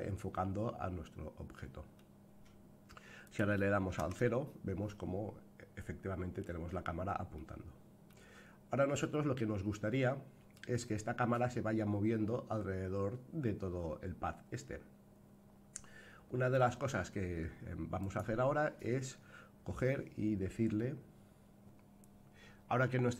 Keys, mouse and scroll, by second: 3.2 click, 4.0 KP_0, 5.1-5.9 scroll down 5, 5.9-6.8 scroll up 3, 6.8-7.4 scroll down 1, 7.4-8.1 middle drag, 8.4-9.0 scroll down 4, 9.0-10.5 middle drag, 17.9 click.